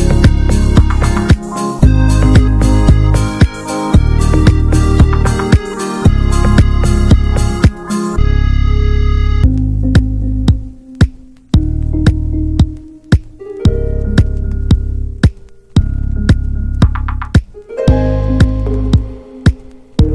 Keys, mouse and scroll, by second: 0.7-1.5 shift+middle drag, 1.5 e, 2.7 alt+s, 4.5-6.0 middle drag, 6.0 alt+s, 6.9-7.4 scroll up 1, 7.4 click, 7.7 alt+shift+click, 7.9 alt+shift+click, 8.3 alt+s, 13.4-14.3 drag, 14.7 scroll down 1, 14.9-17.4 middle drag, 17.5 Tab, 17.7 drag, 17.9 scroll down 1, 18.1-18.4 middle drag, 18.4 drag, 18.7-19.3 middle drag, 19.3 ctrl+a, 19.7 shift+middle drag, 20.0 click.